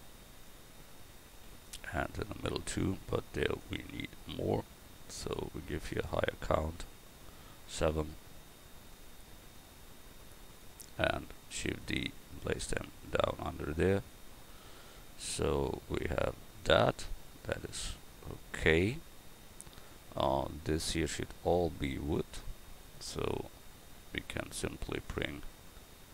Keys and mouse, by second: 0.4-4.5 drag, 1.3 shift+d, 9.6-11.5 drag, 11.5 shift+d, 12.6-14.7 drag, 22.8-26.1 right drag.